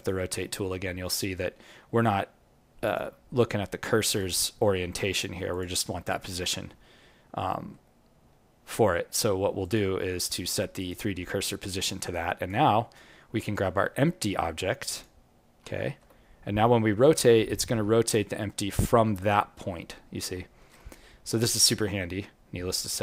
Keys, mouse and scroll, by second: 6.4-6.7 scroll down 2, 6.9 alt+middle click, 10.1 click, 11.4-12.1 scroll down 4, 12.1 right click, 12.7-13.0 scroll down 1, 13.4 scroll down 5, 13.5 alt+middle click, 13.9-14.6 scroll down 1, 14.9 click, 15.7 alt+middle click, 16.1 scroll down 1, 17.5 click, 17.5-17.9 scroll down 1, 21.8 alt+middle click.